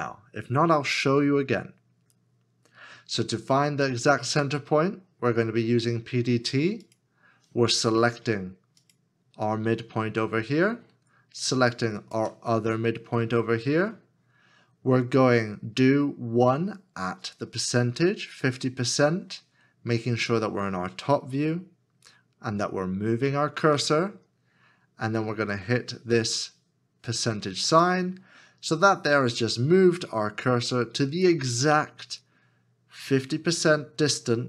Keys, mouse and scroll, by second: 11.7 shift+click.